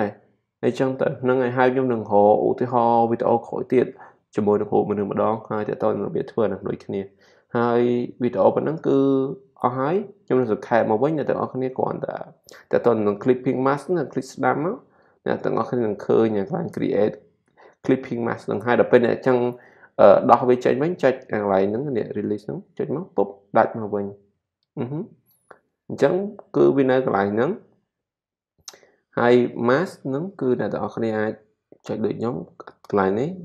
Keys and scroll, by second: 24.7 super+z.